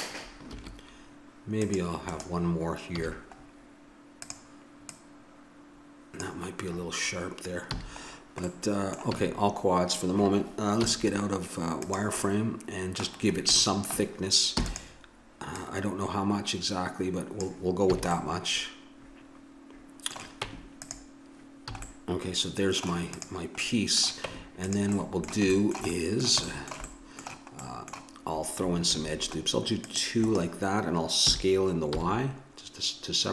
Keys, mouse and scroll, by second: 0.5 ctrl+r, 2.9 a, 4.2-6.8 drag, 7.7 a, 8.6 middle click, 9.1 a, 10.8 z, 14.5 e, 15.5-17.7 drag, 17.9 a, 20.4 Tab, 21.7 a, 23.1-24.9 drag, 24.2 Tab, 28.9 ctrl+r, 31.3 s.